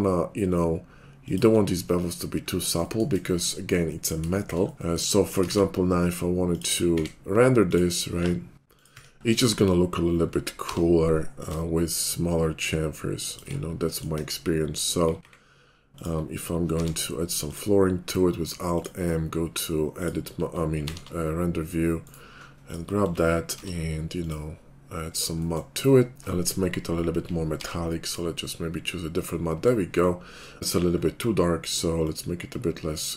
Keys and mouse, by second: 1.3 shift+click, 2.8 shift+click, 3.6 shift+click, 5.5 shift+a, 7.0 s, 7.4-8.4 drag, 8.6 ctrl+z, 8.6 h, 8.6 g, 8.9 `, 9.2-12.4 drag, 9.4 KP_5, 10.5 g, 14.1 KP_5, 15.1 s, 16.8 alt+m, 18.8 middle click, 20.9 alt+n, 23.5 alt+m, 26.2-32.2 drag, 27.6 alt+m, 32.1-33.1 middle drag, 32.1 right click.